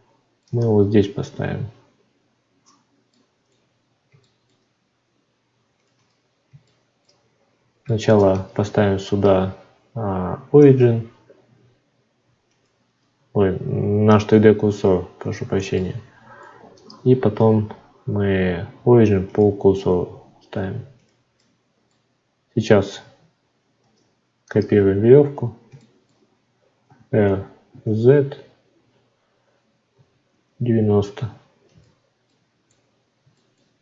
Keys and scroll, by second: 0.6 Tab, 8.5 shift+s, 13.1 Tab, 23.8 shift+d.